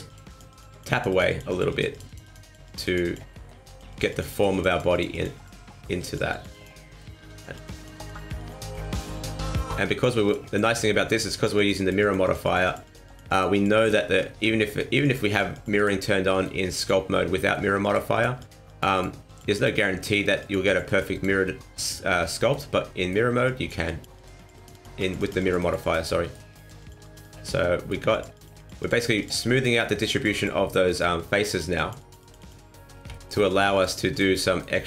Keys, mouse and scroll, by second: 0.0 click, 0.2 click, 0.4 click, 0.7 click, 0.9 click, 1.0 click, 1.2 click, 1.4 click, 1.6 click, 1.9 click, 2.0 click, 2.2 click, 2.4 click, 2.6 click, 2.8 click, 3.0 click, 3.3 middle click, 3.6 click, 3.9 click, 4.0 click, 4.2 click, 4.5 click, 4.6 click, 4.9 click, 5.1 click, 5.3 click, 5.6 middle click, 6.0 click, 6.3 click, 6.5 click, 6.8 middle click, 7.2 click, 7.5 click, 7.7 click, 7.9 click, 8.1 click, 8.3 click, 8.6 click, 8.8 click, 9.0 click, 9.2 click, 9.4 click, 9.6 click, 10.0 middle click, 10.2 click, 10.4 click, 10.6 click, 10.9 middle click, 11.3 click, 11.5 click, 11.7 click, 12.0 click, 12.2 click, 12.4 click, 12.6 click, 12.8 click, 13.0 click, 13.2 click, 13.5 click, 13.7 click, 14.2 ctrl+z, 14.6 middle click, 15.0 click, 15.2 click, 15.5 click, 15.7 click, 16.0 middle click, 16.7 click, 17.1 middle click, 17.8 click, 18.1 click, 18.4 click, 18.6 click, 18.9 click, 19.2 click, 19.5 click, 19.8 middle click, 20.4 click, 20.6 click, 20.8 click, 21.1 click, 21.4 middle click, 22.2 middle click, 22.8 middle click, 23.4 click, 23.8 click, 24.1 click, 24.3 click, 24.5 click, 24.7 click, 25.0 click, 25.1 click, 25.4 click, 25.6 click, 25.8 click, 26.1 middle click, 26.5 click, 26.8 click, 27.0 click, 27.2 click, 27.4 middle click, 28.1 click, 28.3 click, 28.5 click, 28.8 click, 29.0 click, 29.2 click, 29.4 middle click, 29.8 click, 30.1 click, 30.3 click, 30.6 middle click, 31.4 click, 31.7 click, 32.0 click, 32.2 click, 32.4 click, 32.7 middle click, 33.1 shift+middle click, 33.4 click, 33.7 click, 34.0 click, 34.4 middle click, 34.8 click.